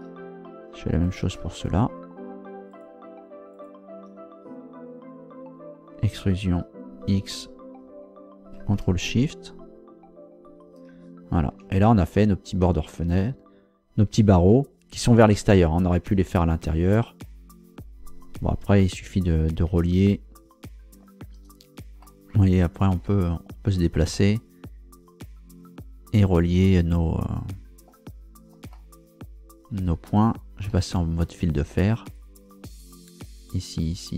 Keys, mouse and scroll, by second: 1.0 shift+right click, 1.5 shift+right click, 2.7 shift+right click, 3.5 shift+right click, 6.1 e, 7.1 x, 10.4 ctrl+shift+click, 11.5 Tab, 16.8 scroll up 2, 19.7 Tab, 20.8 scroll up 2, 22.0-23.1 middle drag, 23.2-23.8 scroll up 2, 24.1-28.1 middle drag, 28.1 scroll up 1, 28.7-30.2 shift+middle drag, 30.7 z, 32.1 right click, 32.8 shift+right click, 33.9 shift+right click.